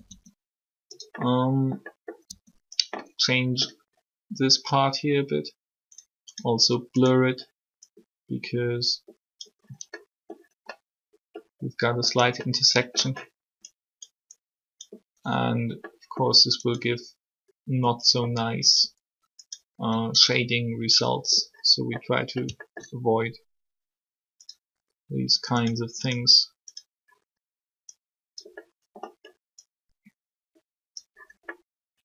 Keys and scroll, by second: 2.2 r.